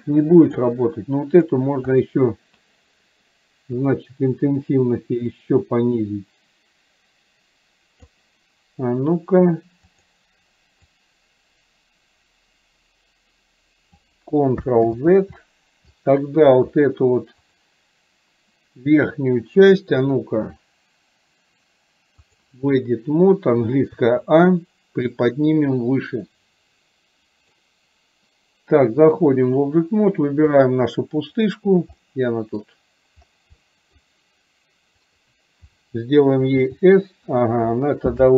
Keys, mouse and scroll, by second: 1.5 click, 2.0 click, 3.9 click, 5.4-8.3 drag, 10.0 click, 10.9-14.1 drag, 15.8 ctrl+click, 17.5 click, 20.0-22.5 drag, 25.3-27.6 drag, 29.0 click, 30.5 click, 32.0-32.6 middle drag, 33.6-34.0 middle drag, 35.0 click.